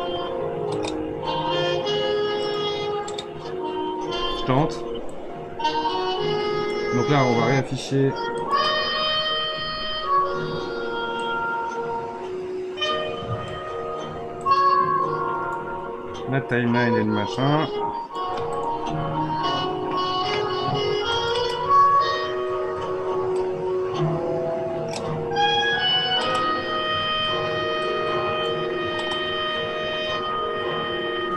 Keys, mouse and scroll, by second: 2.4-7.6 drag, 7.6-8.2 scroll up 3, 8.4 click, 11.1-14.2 drag, 14.4-21.7 drag, 27.8-31.0 drag, 31.0 space.